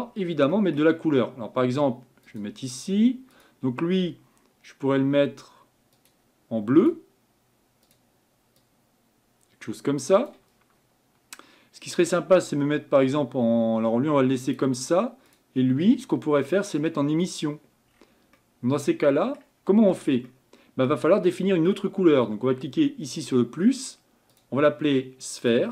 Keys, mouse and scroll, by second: 0.1-0.5 scroll down 4, 2.3 click, 3.4 click, 7.0-8.6 drag, 15.4 click, 23.3-25.7 drag.